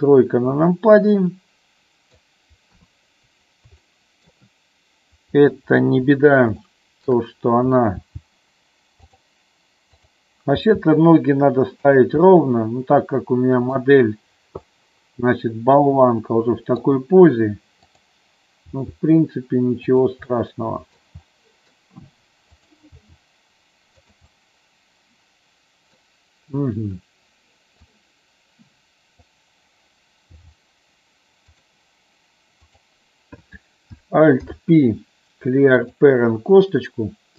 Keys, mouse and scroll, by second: 0.8-2.4 middle drag, 2.9 KP_3, 3.9 shift+middle click, 6.7 shift+middle click, 8.1 g, 10.1 click, 10.6 g, 12.4-13.9 middle drag, 14.8-17.0 middle drag, 18.8 g, 20.0 click, 20.5 middle click, 21.5 middle click, 22.7 click, 23.1 g, 24.1 click, 24.5-26.1 middle drag, 28.0-29.5 drag, 30.4 g, 31.6 click, 32.7 click, 34.6 alt+p.